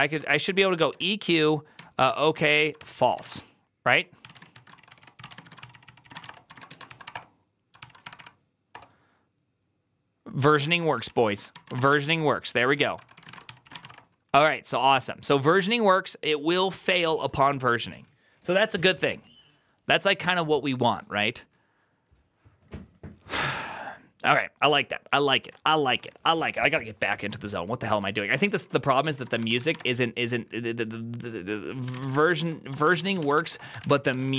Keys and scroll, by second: 0.0-7.0 typing, 1.6 Tab, 2.7 ctrl+c, 7.6 ctrl+c, 7.9 Up, 8.0 Up, 8.6 Return, 10.4 ctrl+a, 10.6-14.2 typing, 10.8 ctrl+c, 12.6 alt++, 12.7 alt+{, 15.4 alt++, 25.6-26.4 typing, 28.0-29.6 typing, 31.7-34.3 typing.